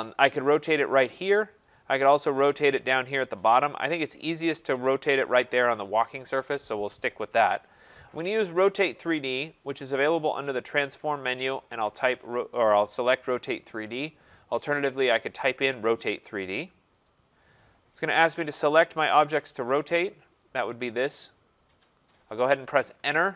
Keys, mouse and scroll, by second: 9.4 click, 10.4 click, 15.2 click, 20.3 click, 23.0 Return.